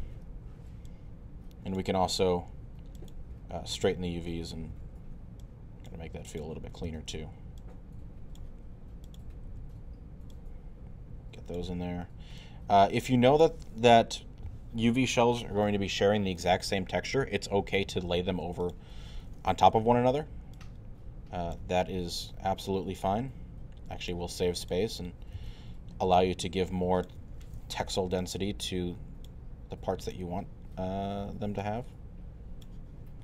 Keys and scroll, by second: 0.0 e, 4.7 w, 6.9 e, 9.5 w, 19.7 e, 21.5 w, 25.4 e, 27.2 w.